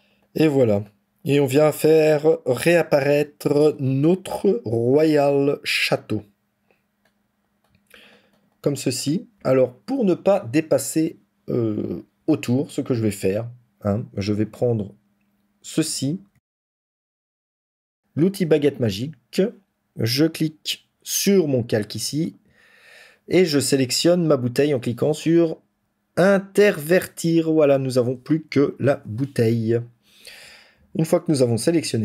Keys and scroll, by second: 16.3 ctrl+z, 28.4 ctrl+-, 28.7 ctrl+-, 30.6 ctrl+-.